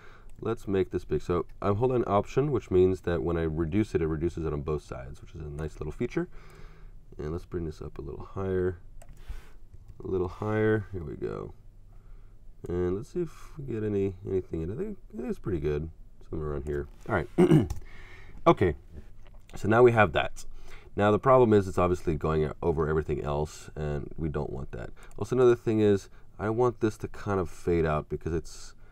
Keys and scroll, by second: 9.7 shift+Up, 10.8 super+Up, 17.7 shift+super+Return.